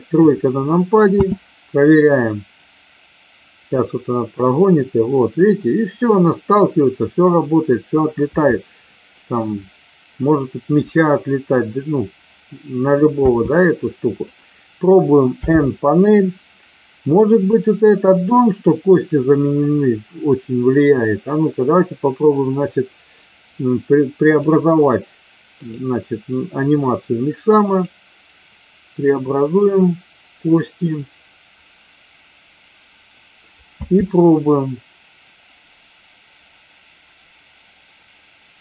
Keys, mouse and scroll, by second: 0.1 KP_3, 1.1 space, 13.2 space, 14.2 click, 15.3 n, 17.3 click, 24.2 click, 25.6-32.6 drag, 33.7 space.